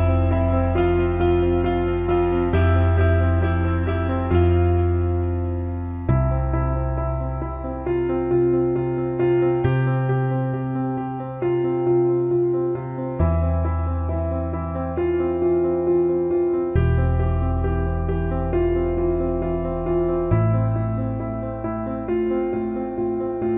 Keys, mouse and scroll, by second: 1.9 click, 2.1 alt+middle click, 2.8 right click, 3.8 alt+middle click, 4.5 alt+middle click, 5.0 alt+shift+middle click, 5.2 alt+middle click, 6.8-11.4 drag, 12.4 ctrl+s, 12.8-13.5 alt+middle drag, 15.7 click, 16.4 click, 19.0 Tab, 19.5 alt+middle click, 20.0 alt+shift+middle click, 22.3 alt+middle click.